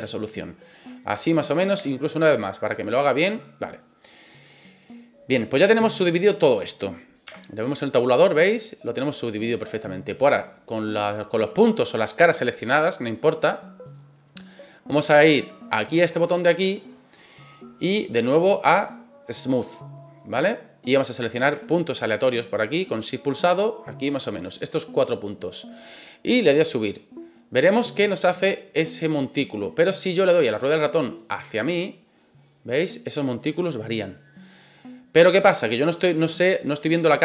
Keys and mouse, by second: 1.0 shift+middle click, 1.7 w, 3.2-3.8 drag, 4.2 right click, 7.3 Tab, 7.9-9.6 middle drag, 11.8 click, 12.7 click, 13.3 click, 13.8 click, 16.5 click, 17.9-20.4 drag, 21.0 right click, 22.2 shift+right click, 23.2 shift+right click, 23.9 shift+right click, 26.4-37.2 drag.